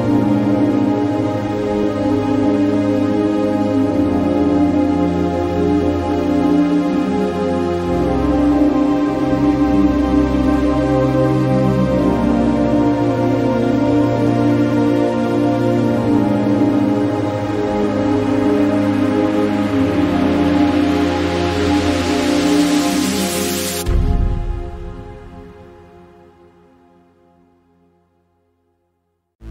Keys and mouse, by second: 8.1 Delete, 10.2 click, 15.2 click, 20.6-21.6 drag, 24.2 click.